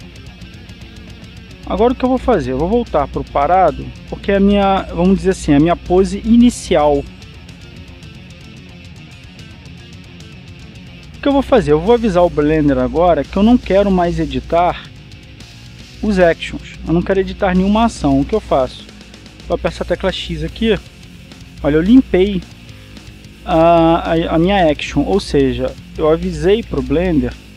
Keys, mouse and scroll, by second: 3.8 click, 4.9 click, 11.0-13.2 drag, 17.2-18.9 drag, 21.5 click.